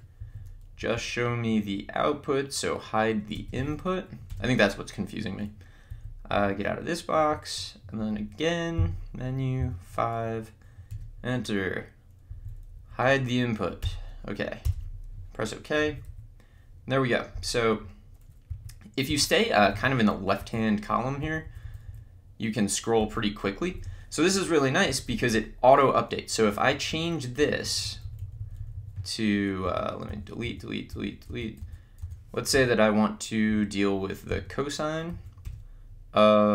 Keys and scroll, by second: 5.9 Down, 8.9 Menu, 9.8 5, 10.9 Return, 15.9 Down, 18.5 Left, 19.5 Right, 20.4 Up, 23.6 Down, 24.9 Up, 26.3 Right, 27.4 Left, 27.6 Right, 29.7 BackSpace, 35.2 Right, 35.4 Return.